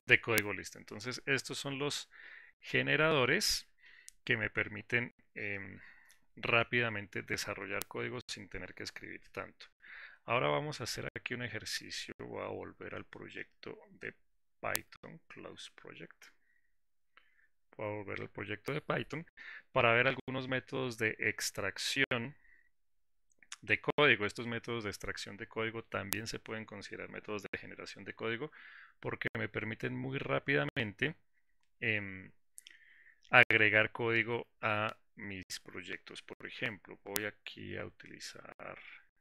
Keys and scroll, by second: 15.7 ctrl+shift+g.